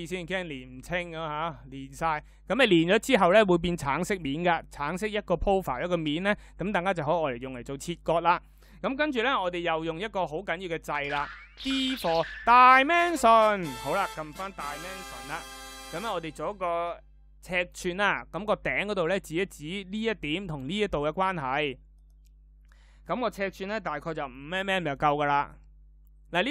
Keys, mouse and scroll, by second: 11.0 d.